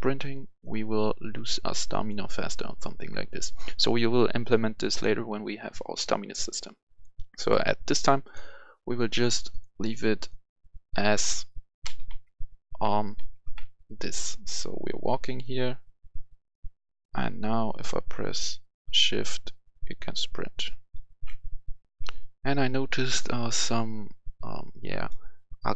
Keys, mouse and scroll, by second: 0.2 right click, 1.2 click, 2.9 click, 3.2 right click, 5.7 right click, 6.8-8.1 drag, 11.8-14.9 typing, 16.9 typing, 21.8 click, 21.8 F10, 24.8 click.